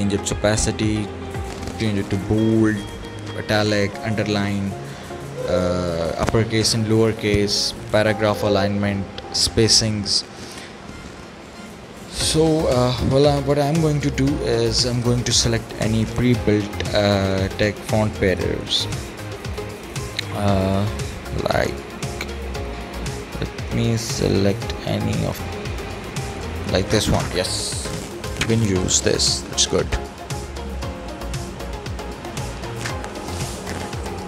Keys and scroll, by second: 13.7 Delete.